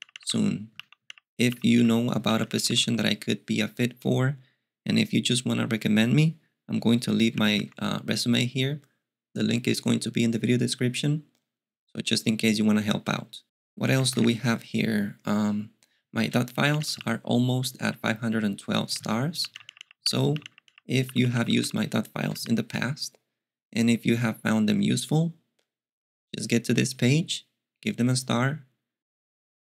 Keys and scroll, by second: 0.0-2.8 typing, 7.1-8.1 typing, 16.5-17.3 typing, 19.2-22.9 typing.